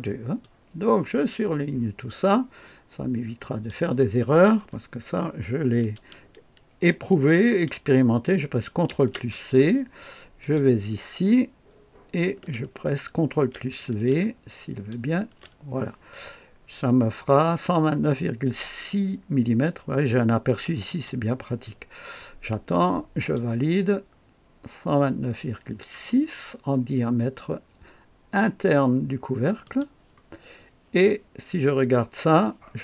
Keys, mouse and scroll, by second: 0.3-3.6 drag, 8.8 ctrl+c, 10.3 click, 13.2 ctrl+v, 14.0 ctrl+click, 15.0 ctrl+click, 15.1 ctrl+v, 20.8 click, 23.1 click, 29.6 click.